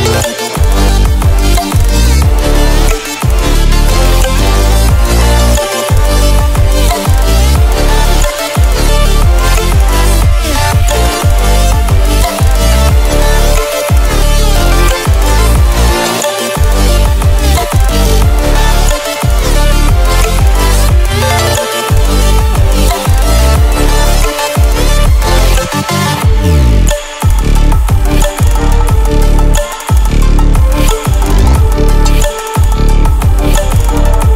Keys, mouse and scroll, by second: 3.0 ctrl+alt+scroll down 1, 3.7-8.3 drag, 8.9-9.6 alt+scroll up 1, 10.3 space, 10.5 click, 10.8 space, 13.0 click, 16.0 click, 17.4-20.3 typing, 21.4-27.0 drag, 31.3 click.